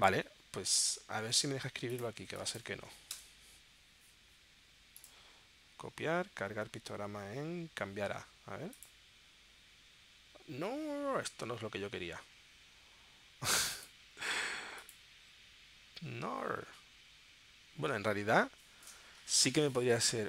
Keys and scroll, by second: 3.1 BackSpace.